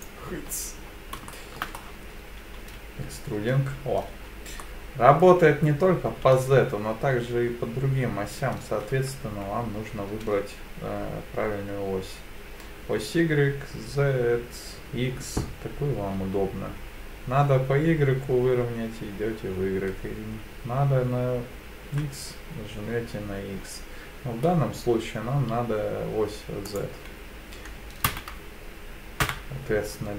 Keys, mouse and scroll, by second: 0.8-1.2 scroll down 2, 1.3 shift+middle click, 1.8-2.4 scroll down 2, 2.6 e, 4.6 middle click, 21.9 x, 24.3 z, 26.7 click, 28.1 ctrl+z, 29.2 KP_1, 30.0-30.1 scroll down 3.